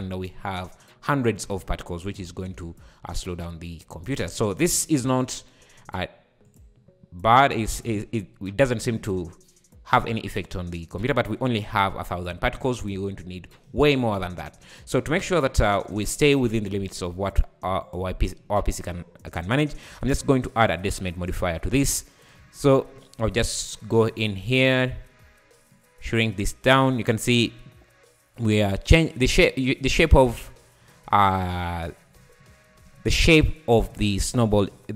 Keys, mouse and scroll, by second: 0.3 `, 1.6-2.1 scroll up 4, 2.1 scroll down 3, 2.3 `, 2.6 space, 3.2 `, 4.4 scroll up 4, 4.8 `, 5.6 scroll up 1, 6.5 click, 7.7 click, 8.1 scroll up 4, 8.4 `, 10.7 scroll down 4, 11.1 space, 12.1 `, 12.5 `, 13.0 scroll down 3, 13.2 `, 14.0-14.4 scroll up 3, 15.9 click, 17.9-19.0 drag, 19.3 click, 20.1 click, 21.2-23.6 drag, 23.7 click, 25.7-28.7 drag, 29.9 `, 32.2 `, 33.3 `, 33.8 `, 34.5 scroll up 2, 34.7 `.